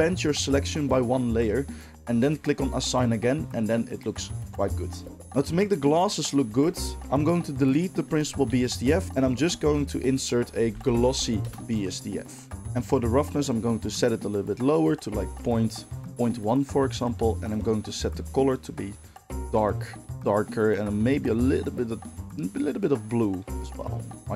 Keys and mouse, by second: 5.2 Tab, 6.3-7.9 ctrl+middle drag, 7.9 click, 8.0-12.6 middle drag, 8.6 x, 8.9 shift+a, 9.5 shift+a, 11.1 s, 12.6-17.5 drag, 17.5-24.3 middle drag.